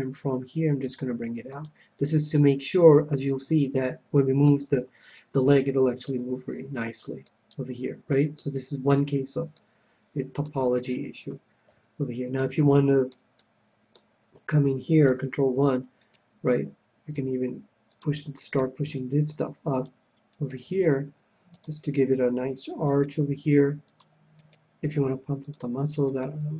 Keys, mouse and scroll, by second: 0.0 KP_3, 1.2 g, 2.0-3.7 drag, 3.7 click, 4.1-5.9 middle drag, 6.4 a, 6.9-9.2 middle drag, 9.2 KP_1, 9.9-15.3 middle drag, 11.9 KP_3, 16.4-18.1 right drag, 17.5 g, 18.3-19.9 drag, 18.8-22.7 right drag, 19.2 g, 20.2-23.6 drag, 21.0 g, 23.3-24.8 right drag, 23.6 g, 24.4 click, 25.2 g.